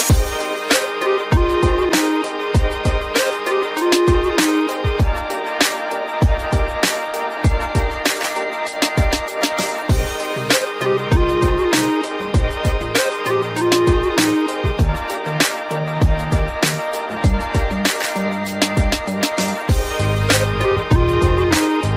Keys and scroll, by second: 16.5 ctrl+g, 17.9 ctrl+alt+shift+e.